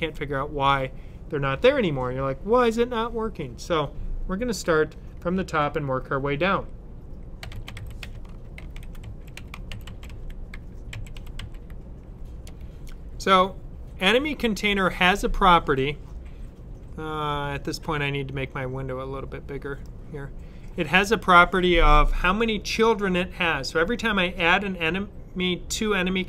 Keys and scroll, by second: 7.0-11.7 typing.